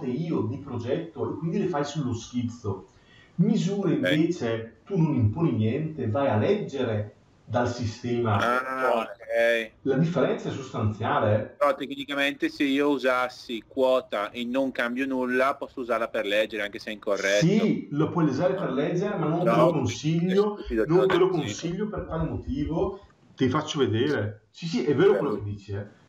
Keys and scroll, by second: 21.8 Escape.